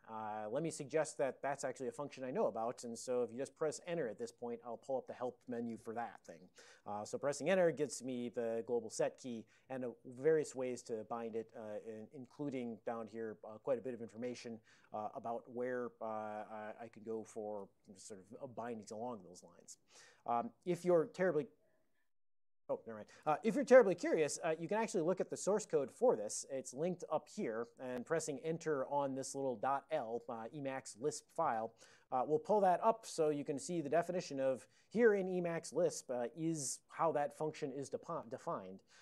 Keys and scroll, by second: 12.4 Down, 12.5 Down, 13.2 Up, 13.7 Up, 17.1 Down, 24.1 alt+<, 26.7 ctrl+e, 27.5 ctrl+b, 27.8 ctrl+b, 28.0 ctrl+b, 33.3 ctrl+x, 33.7 1, 35.6 Down, 35.7 Down, 38.6 Down.